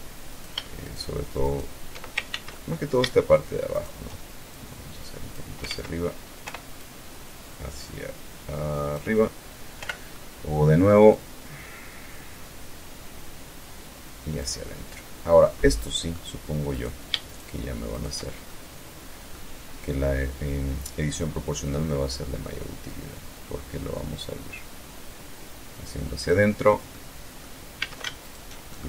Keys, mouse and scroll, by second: 0.0 shift+right click, 0.5 shift+right click, 1.4 ctrl+shift+z, 1.7 ctrl+middle click, 2.9 shift+right click, 3.6-4.7 shift+drag, 4.8 ctrl+z, 5.5 o, 5.9-8.3 drag, 8.9 o, 9.3 middle click, 10.3-11.9 drag, 11.9 scroll up 1, 12.1-12.6 scroll down 1, 12.6-12.9 scroll up 1, 12.9-13.8 scroll down 1, 13.8-14.6 middle drag, 14.9-15.4 middle drag, 15.9 right click, 16.4 shift+right click, 17.1 shift+right click, 17.6-18.6 shift+middle drag, 18.9-20.3 drag, 20.3 scroll up 2, 20.6-21.1 scroll down 2, 21.2-21.8 scroll down 2, 22.6-23.3 scroll down 1, 23.3 scroll down 1, 23.4 scroll up 1, 23.6-26.0 scroll down 1, 26.0 right click, 26.9 a, 27.4 alt+shift+right click, 27.8 alt+shift+middle click, 28.4 ctrl+z.